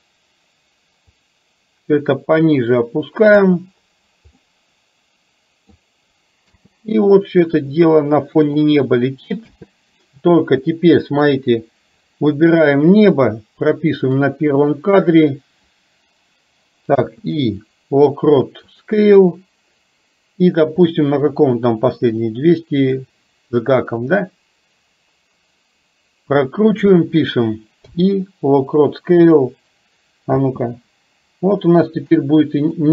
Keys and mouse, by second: 1.3-3.5 drag, 4.5-5.8 middle drag, 6.7 space, 7.9 middle click, 9.5 space, 10.7 KP_7, 14.2 click, 17.0 i, 22.9 click, 24.3-26.9 drag, 30.5 space, 32.3 middle click.